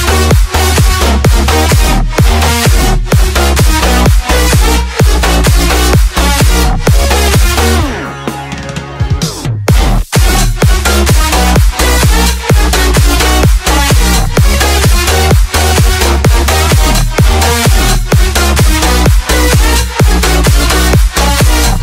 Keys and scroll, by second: 4.7 Right, 9.7 space, 17.5 space, 21.2 space.